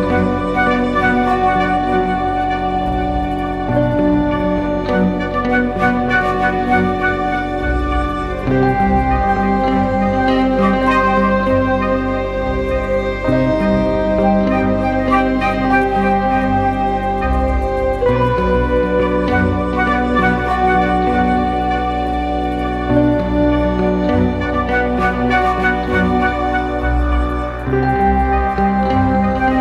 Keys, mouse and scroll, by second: 0.4 double click, 3.4 right click, 4.9-5.3 typing, 5.7 double click, 17.4 double click, 25.0 alt+click.